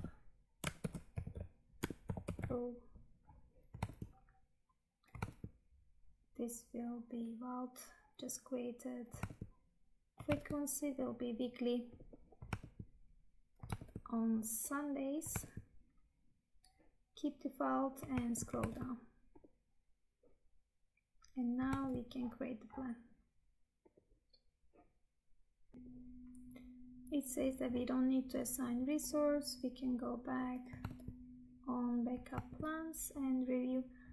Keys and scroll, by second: 3.9 Tab, 6.3 Tab, 9.3 Tab, 12.7 Tab, 15.6 Tab, 18.4 Tab, 21.9 Tab, 30.8 Tab, 32.5 Tab.